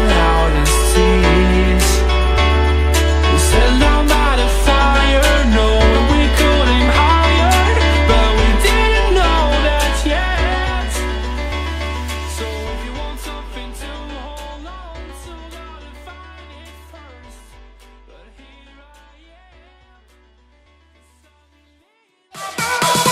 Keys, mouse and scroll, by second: 10.4-16.0 drag, 16.0-23.1 middle drag.